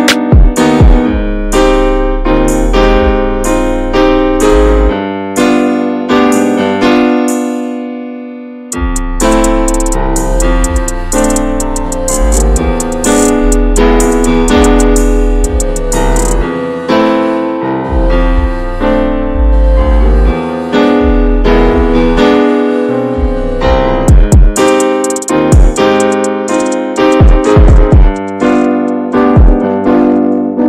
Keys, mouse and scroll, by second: 2.5-3.0 scroll up 1, 3.0-5.4 shift+middle drag, 5.4-6.6 drag, 6.6-6.9 scroll down 1, 6.9 middle click, 7.8 scroll up 1, 8.3-9.1 scroll down 16, 9.2 shift+middle click, 9.4 scroll up 1, 10.3-12.1 scroll down 1, 12.1 click, 13.0 click, 13.3-15.7 middle drag, 15.7 alt+h, 16.0 click, 17.0 click, 17.4 click, 17.8-18.3 middle drag, 18.3 scroll up 2, 18.4-19.9 shift+middle drag, 19.9 ctrl+s, 19.9 drag, 20.3 scroll down 2, 20.6-20.9 shift+middle drag, 20.9 click, 22.0 shift+h, 23.3 click, 23.9 alt+middle click, 24.2 alt+middle click, 27.8 shift+middle click, 28.2-28.9 scroll down 2, 29.2-30.6 drag.